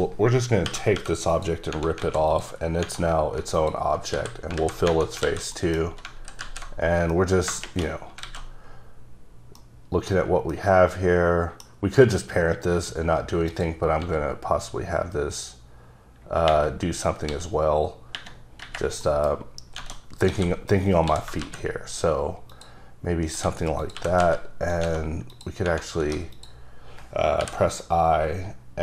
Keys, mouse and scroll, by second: 0.8 typing, 1.4 click, 2.1 alt+a, 2.4 click, 2.7 scroll down 1, 3.7 alt+click, 4.2 f, 4.7 alt+z, 5.2 scroll down 1, 5.3 alt+a, 5.6 middle click, 5.9 scroll down 2, 6.5 alt+z, 6.9 scroll down 2, 7.1 scroll up 1, 7.2 middle click, 8.1 scroll down 1, 8.3 alt+a, 9.7 middle click, 10.6 middle click, 11.9-12.6 scroll up 2, 13.6 click, 14.1 s, 17.4 s, 19.0-19.9 scroll up 3, 19.1 middle click, 20.4 a, 21.2 s, 21.5 z, 22.6 click, 23.5 3, 23.9 click, 24.1 g, 24.3 z, 24.8 click, 25.4 click, 26.1 3, 26.5 click, 27.0-27.5 scroll up 1, 27.5 i.